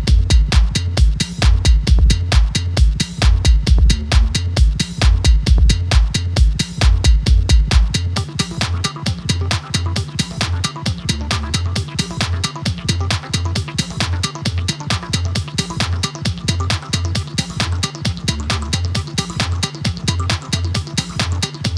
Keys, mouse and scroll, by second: 1.4 click, 4.0 click, 7.4 click, 9.9 Tab, 12.6-13.5 click, 13.6-15.8 click, 16.0 alt+scroll down 1, 16.5-19.6 shift+drag.